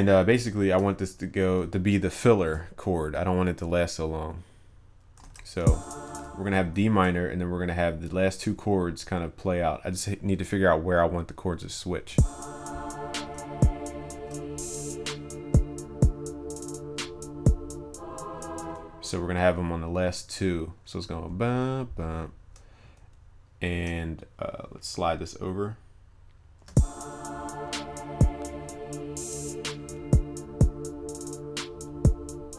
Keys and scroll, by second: 1.1 ctrl+s, 5.2 ctrl+z.